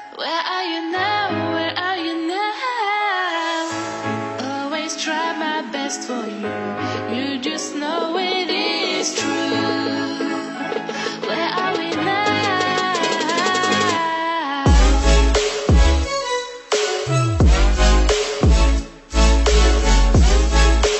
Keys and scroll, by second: 18.0 Delete, 19.4 ctrl+0.